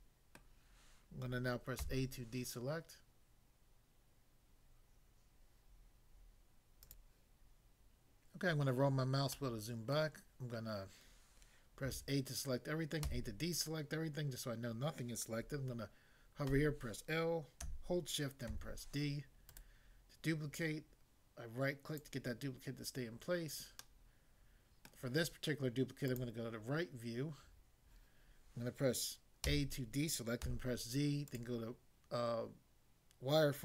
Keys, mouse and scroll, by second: 0.6 middle click, 1.8 a, 6.8 click, 8.4 scroll down 1, 9.4 middle click, 10.0 middle click, 11.9 a, 13.0 a, 16.6 l, 18.5 d, 19.5 right click, 20.6 click, 22.0 click, 23.8 middle click, 24.9 middle click, 26.1 click, 29.5 a, 30.5 z, 31.3 click.